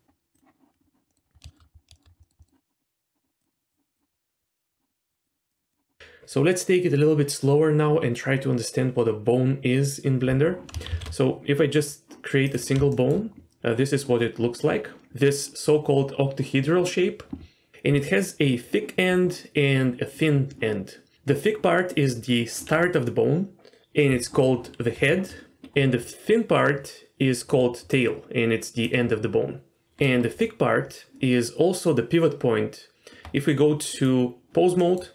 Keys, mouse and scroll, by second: 1.1 middle click, 1.2-2.2 scroll down 5, 1.5 shift+middle click, 1.9 shift+middle click, 2.2 middle click, 2.4 middle click, 3.4 click, 3.7 click, 3.9 click, 5.1 click, 5.2 click, 5.5 click, 5.7 click, 10.9 shift+a, 12.9 shift+middle drag, 24.9 d, 25.2-25.6 drag, 25.6 d, 27.5 d, 27.9-28.8 drag, 28.8 d, 28.9 d, 30.8 Tab, 34.8 middle click, 34.8 click.